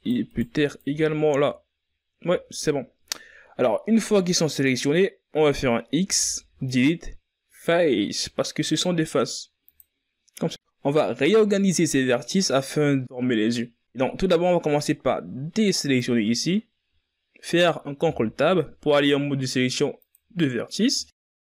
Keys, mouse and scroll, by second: 0.1 shift+right click, 0.5 shift+right click, 0.8 shift+right click, 1.2 z, 2.5 z, 3.3-4.1 scroll down 4, 4.5-6.2 scroll up 5, 6.2 x, 11.1-11.8 scroll down 4, 11.8-12.4 scroll up 4, 17.4 click, 19.6 ctrl+Tab.